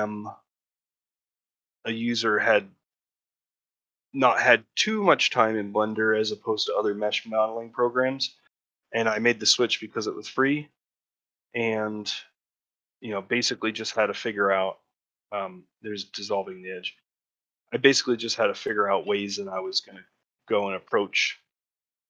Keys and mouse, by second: 0.9 2, 1.9 shift+click, 2.2 middle click, 2.6 ctrl+middle click, 2.9 shift+middle click, 4.4 middle click, 9.5 shift+middle click, 9.8 f, 10.2 shift+middle click, 11.2 middle click, 16.0 middle click, 16.8 middle click, 17.3 middle click, 18.0 click, 19.0 shift+click, 20.2 middle click, 20.7-21.9 ctrl+middle drag.